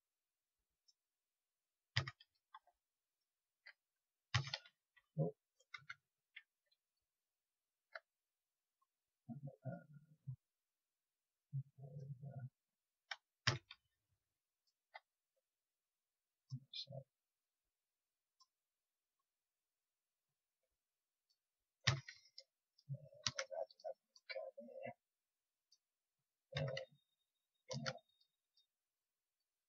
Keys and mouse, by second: 1.9-3.0 middle drag, 1.9 a, 4.3 a, 4.6 space, 13.4 a, 21.8 a, 23.2 ctrl+r, 26.5 a, 27.6 ctrl+r, 29.3-29.6 drag.